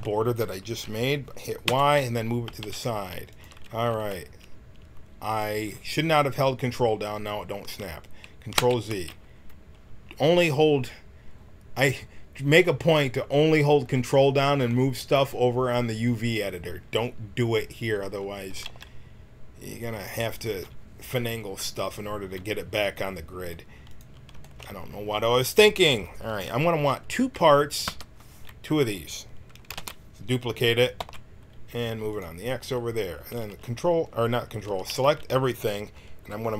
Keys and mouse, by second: 0.5-1.6 middle drag, 1.6 y, 2.4 g, 8.5 ctrl+z, 18.6 g, 25.6 a, 27.8 l, 29.8 shift+d, 33.3 a, 33.5 a, 34.6 a, 34.9 a.